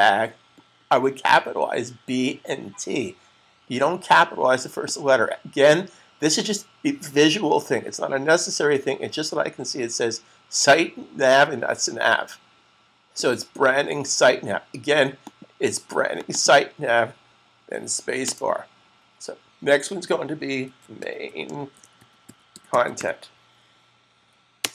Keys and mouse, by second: 4.7 click, 14.1 click, 16.2 double click, 17.2 Right, 18.2 space, 20.4-23.4 typing, 24.5 space.